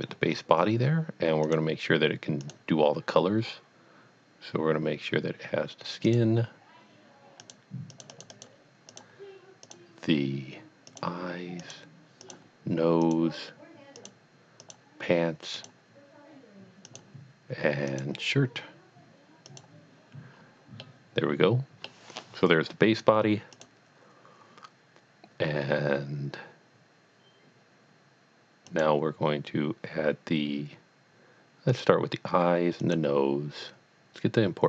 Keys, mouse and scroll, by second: 0.3 scroll down 1, 1.4 click, 2.5 click, 6.0 click, 6.6 click, 7.4 click, 8.0 click, 8.1 double click, 8.4 click, 8.9 click, 9.7 click, 10.9 click, 11.6 click, 12.3 click, 13.0 click, 14.0 click, 15.6 click, 16.9 click, 17.9 click, 19.5 click, 20.3 scroll down 1, 20.8 middle click, 23.5 click, 28.7 click, 31.7 click, 32.0 click, 32.8 click.